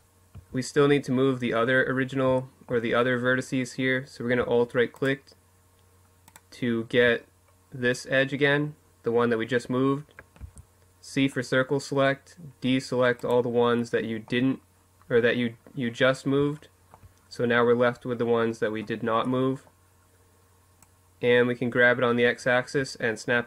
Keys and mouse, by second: 3.7-6.7 right drag, 6.7-9.3 middle drag, 9.1 c, 12.8-14.6 middle drag, 15.3-16.8 middle drag, 17.5 middle click, 18.3-19.6 middle drag, 19.6-21.3 drag.